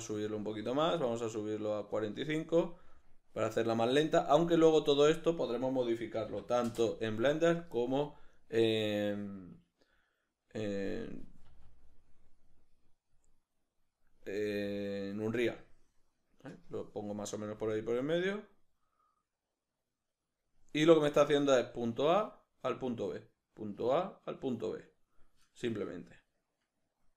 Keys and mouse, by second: 2.0 click, 6.8 Return, 6.8-8.3 drag, 8.3 right click, 11.5 a, 14.4 g, 15.3 click.